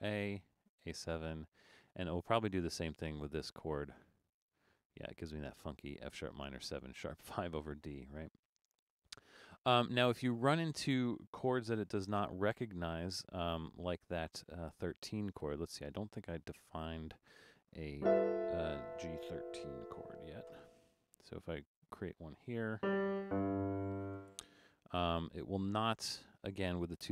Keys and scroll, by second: 12.8 BackSpace, 20.2 5, 23.9 5.